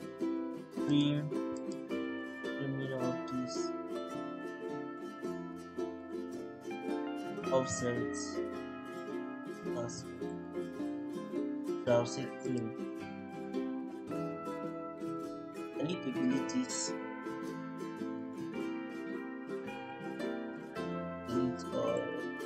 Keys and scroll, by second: 6.7 Escape, 7.2-8.0 typing, 10.8 Escape, 11.2-12.1 typing, 16.8 Delete, 18.2 Delete, 20.1 Delete.